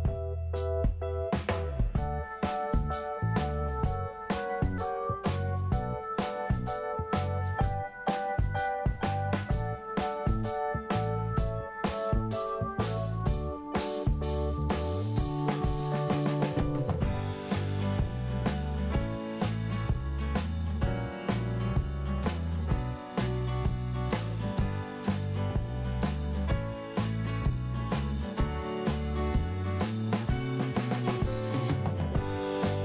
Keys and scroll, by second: 1.3 1, 1.6 Return, 2.2 2, 2.3 Return, 9.2 Delete, 9.6 alt+q, 13.7-14.5 typing.